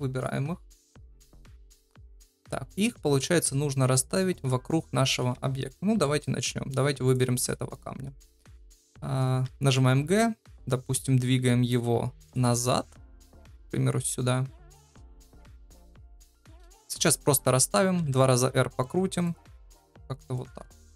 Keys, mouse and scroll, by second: 1.6 middle click, 5.9 KP_7, 9.4 g, 12.5 middle click, 13.1 g, 16.9 KP_7, 17.9 r, 19.8 middle click, 20.6 KP_0.